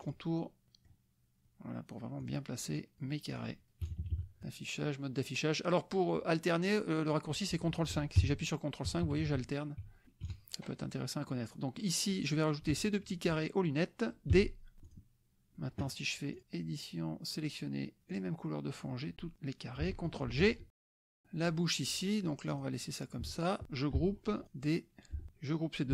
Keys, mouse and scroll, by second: 0.0 click, 0.7 click, 1.4 drag, 2.2 click, 3.5 click, 3.8 KP_Subtract, 4.4 click, 7.5 click, 8.2 ctrl+KP_5, 10.2 ctrl+KP_Subtract, 11.0 click, 12.1 click, 12.8 shift+click, 14.3 d, 14.9 click, 16.3 click, 18.2 click, 20.3 ctrl+g, 20.7 KP_Subtract, 21.2 click, 21.5 click, 22.5 click, 23.5 shift+click, 24.4 ctrl+d, 25.1 F1, 25.3 shift+click.